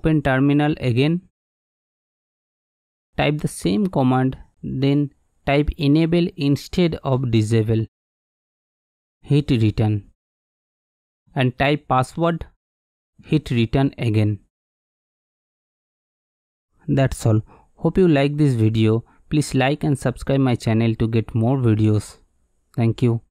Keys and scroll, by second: 0.2-1.1 typing, 2.5 super+=, 2.6 super+=, 4.2 Up, 5.5-10.1 typing, 10.7 Return, 10.7 Return.